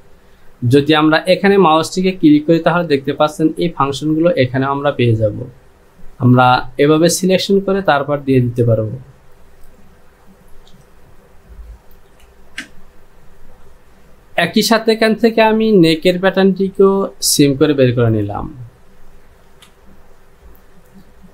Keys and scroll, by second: 12.1 j, 19.5 Home.